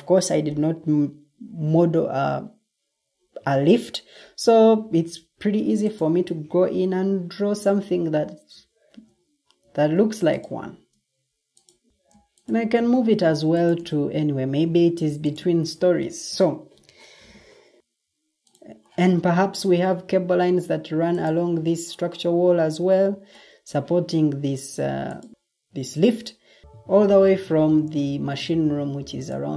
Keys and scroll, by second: 0.4 Escape, 5.1-6.0 typing, 6.2 ctrl+d, 7.7 Escape, 9.5 7, 10.0 Return, 10.3 Escape, 12.8 ctrl+d, 15.7 Escape.